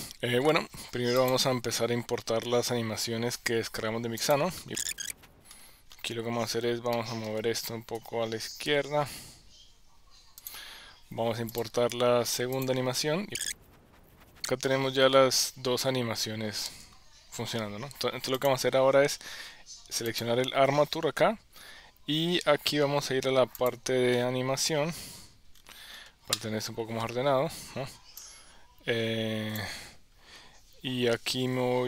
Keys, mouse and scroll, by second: 1.3-4.4 drag, 5.4 KP_1, 6.9-7.3 shift+middle drag, 8.0 g, 11.5 click, 12.6-13.6 drag, 14.4 click, 14.6 space, 16.9 space, 18.5 click, 20.1 click.